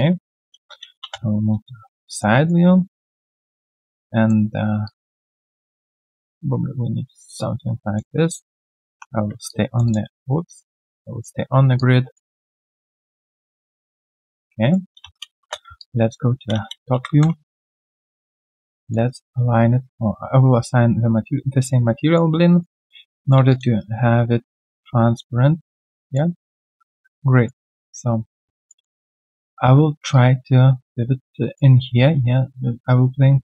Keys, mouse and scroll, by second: 0.6 typing, 1.6 alt+right click, 2.0 alt+middle click, 2.3 alt+right click, 3.3 typing, 7.6 right click, 9.5-11.4 typing, 14.4 right click, 14.8 q, 15.7 alt+click, 16.5 space, 17.2 f, 18.1 right click, 18.7 alt+middle click, 19.0 alt+right click, 22.6 alt+middle click, 23.0 right click, 23.3 q, 23.8 right click, 26.6 alt+middle click, 27.1 right click, 28.2 right click, 28.8 alt+middle click, 29.6 r.